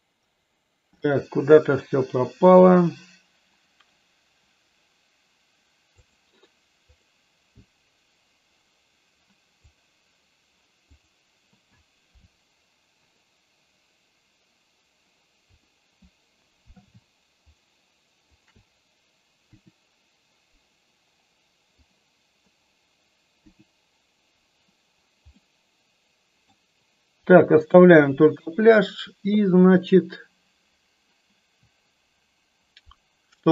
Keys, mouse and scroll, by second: 1.1-7.6 drag, 17.6 shift+click, 18.4 shift+click, 19.4 Delete, 21.7-22.6 drag, 23.3 Delete, 25.3-26.4 middle drag.